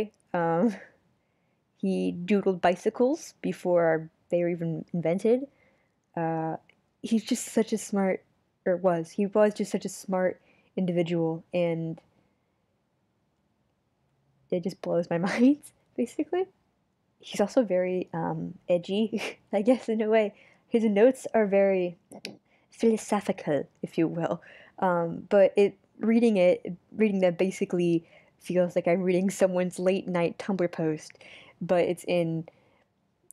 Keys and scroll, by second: 6.8 super+z, 7.6 super+z, 12.0 super+z, 12.7 super+z.